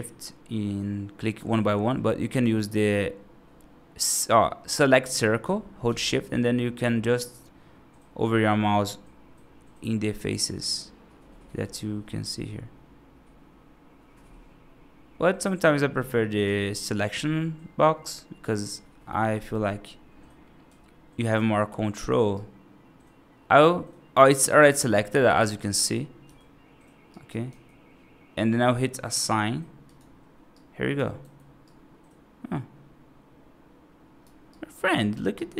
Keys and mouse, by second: 2.8-5.3 drag, 5.9-16.3 shift+drag, 18.0-19.7 drag, 22.2-24.2 right drag, 24.8 middle click, 26.1 y, 27.0 right click, 27.4 y, 29.0 click, 29.8 click, 30.4 right click, 31.1 F2, 31.5-34.1 right drag, 34.4 right click, 34.8 right drag, 35.2 right drag.